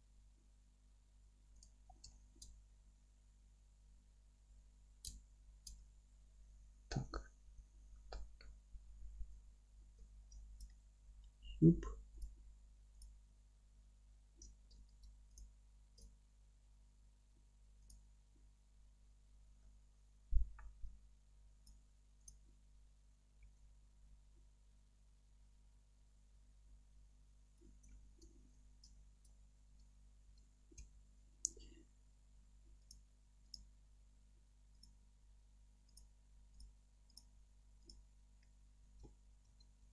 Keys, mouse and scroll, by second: 1.6 click, 1.8 scroll up 1, 2.1-10.7 alt+middle drag, 2.5-2.8 scroll up 1, 2.8 g, 5.1 ctrl+z, 6.9 g, 7.5 Escape, 8.0-9.0 scroll down 1, 12.2 click, 17.9 ctrl+alt+click, 18.3 g, 19.3 scroll up 1, 19.6-22.3 middle drag, 21.6 m, 22.3 click, 23.5 g, 26.8 scroll up 1, 27.1-30.5 middle drag, 27.4 scroll down 1, 29.7 Tab, 34.9-38.8 middle drag, 38.8 Tab.